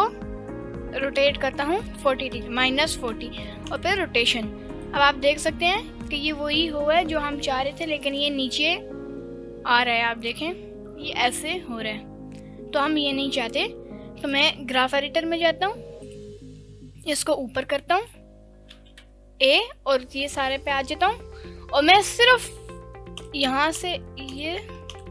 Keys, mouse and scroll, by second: 2.0 ctrl+click, 3.1 i, 4.8-13.3 drag, 16.1-16.5 drag, 17.2-18.2 drag, 18.7 a, 18.9 KP_Decimal, 23.2 click, 23.8 shift+click, 24.3 shift+click, 24.9 click.